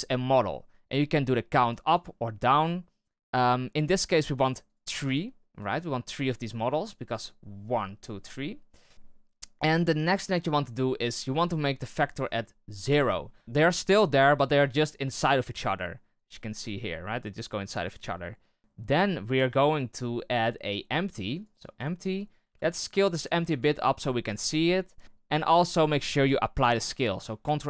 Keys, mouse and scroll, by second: 1.5-5.3 drag, 5.3-9.5 shift+middle drag, 12.0-13.4 drag, 16.1-17.8 drag, 18.6 shift+a, 19.3 shift+a, 21.8-22.4 shift+middle drag, 22.4 s, 25.2 right click, 25.6 right click, 27.4 ctrl+a.